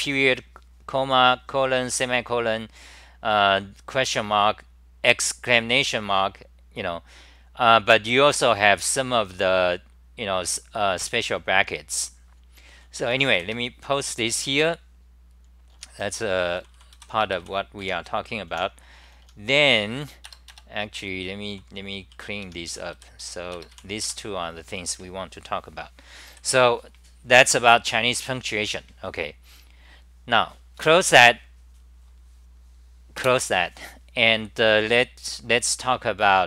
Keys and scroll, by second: 15.5-17.5 typing, 17.8 Home, 18.5 t, 18.9 t, 19.2 t, 20.8-23.7 typing, 24.0 Home, 26.3 d.